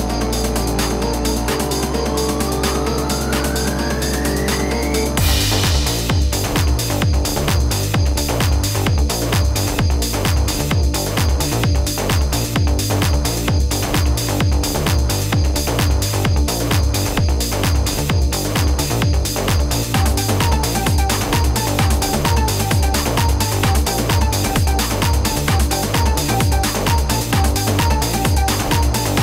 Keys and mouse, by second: 0.0-2.1 typing, 0.1 click, 2.7 ctrl+z, 4.0 space, 4.1 click, 4.3 space, 4.8 z, 5.2 z, 7.7 z, 8.9 ctrl+z, 9.3 ctrl+z, 9.8 space, 9.9 click, 10.0 space, 10.6 ctrl+z, 11.7 space, 11.8 click, 14.5 space, 14.6 click, 14.6 space, 15.6 space, 15.7 click, 17.9-20.4 typing, 18.8 click, 19.5 click, 20.0 click, 20.3 click, 20.5 click, 22.8 space, 22.9 click, 23.1 space, 23.5 z, 24.7 space, 24.9 click, 26.4-27.9 typing, 27.9 click.